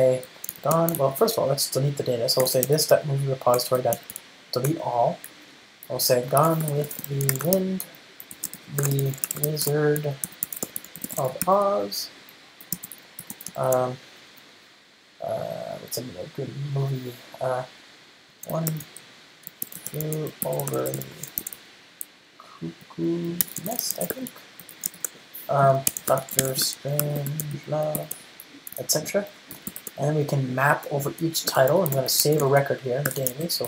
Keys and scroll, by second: 3.7 Return, 8.7 Return, 31.0 Return.